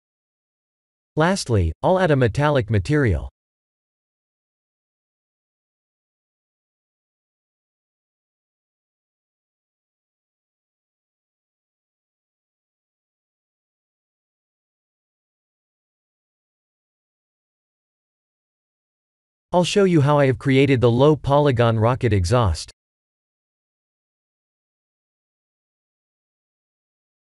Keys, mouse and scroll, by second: 1.6 click, 3.9 click, 4.8 click, 6.2 click, 8.8 click, 13.2-14.7 scroll down 3, 14.7 click, 14.7 scroll down 1, 17.1 click, 17.6 KP_1, 18.2-18.9 scroll down 2, 18.9 click, 18.9 scroll down 4, 19.4 middle click, 23.5 middle click, 23.9 click, 24.9 middle click, 26.3 shift+z, 26.7 b.